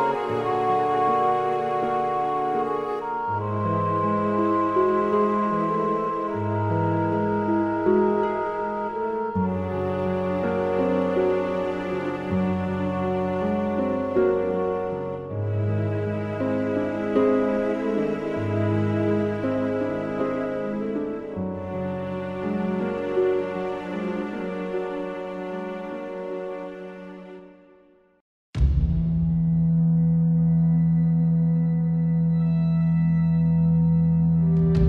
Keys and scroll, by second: 7.8 super+z, 13.7 super+e, 16.0 super+u, 18.2 Return, 23.5 super+t, 27.4 ↺, 27.8 super+t, 31.6 Return.